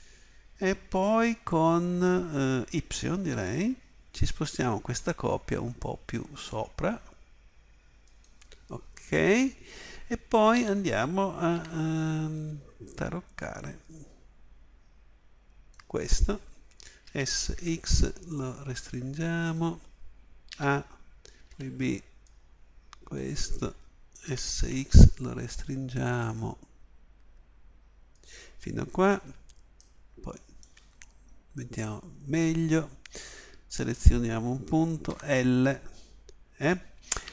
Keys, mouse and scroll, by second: 10.6 a, 11.5 b, 17.0 s, 20.5 a, 21.5 b, 24.3 s, 29.9-35.1 middle drag, 35.1 l.